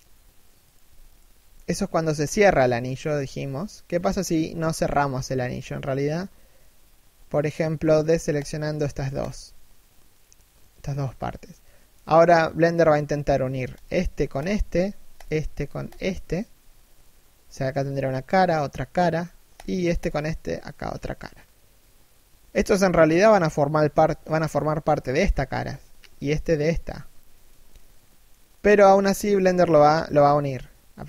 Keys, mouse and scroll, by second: 0.3 right click, 0.8 alt+right click, 2.2 middle click, 8.0 shift+right click, 9.8 middle click, 13.4 right click, 14.0 shift+right click, 19.2 shift+right click, 27.7 middle click, 28.7 shift+middle click.